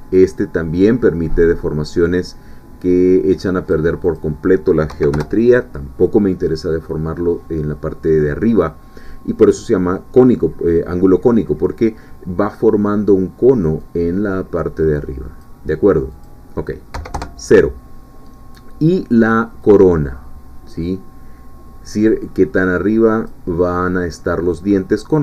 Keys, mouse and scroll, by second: 4.9 0, 5.1 Return, 13.8-15.6 drag, 16.1 click, 16.9 0, 17.1 Return, 19.6-23.8 drag.